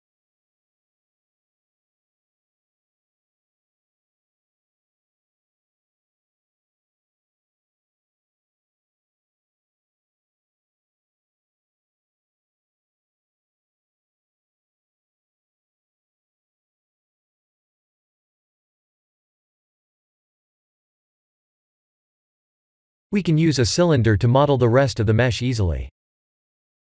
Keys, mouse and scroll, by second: 0.7 e, 3.9 2, 4.3 alt+click, 5.6 alt+shift+click, 6.2 middle click, 6.3 middle click, 7.9 alt+shift+click, 8.8 ctrl+z, 9.7 alt+shift+click, 11.9 middle click, 13.1 ctrl+b, 17.8 Tab, 18.2 middle click, 20.0 right click, 21.8 scroll down 1, 22.1 middle click, 23.5 click, 23.9 click, 24.7 click, 25.3 click, 25.6 shift+a.